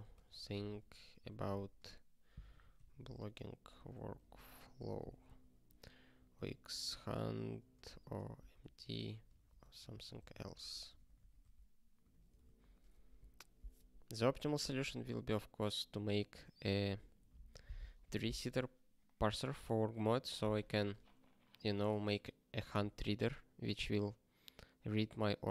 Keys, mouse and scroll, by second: 0.0-11.9 typing, 12.4 ctrl+s.